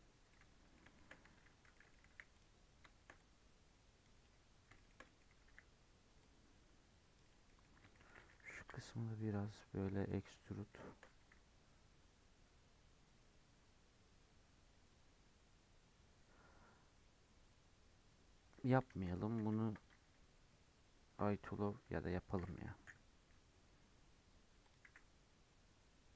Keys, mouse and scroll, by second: 0.2-0.7 middle drag, 0.7 scroll up 1, 0.9 shift+middle click, 1.1 Tab, 1.3 3, 1.7 middle click, 2.1 c, 4.7 shift+middle click, 5.4 c, 7.4-8.6 middle drag, 8.6 i, 10.4 middle click, 11.2 e, 18.9 ctrl+z, 19.4 ctrl+z, 20.2 Tab, 21.8 Tab, 22.8 i, 24.8 e.